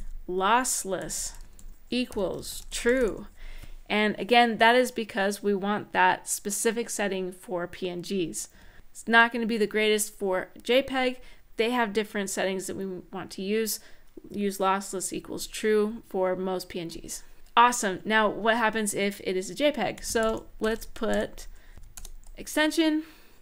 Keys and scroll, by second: 0.0-3.2 typing, 8.3 Tab, 19.5-23.4 typing.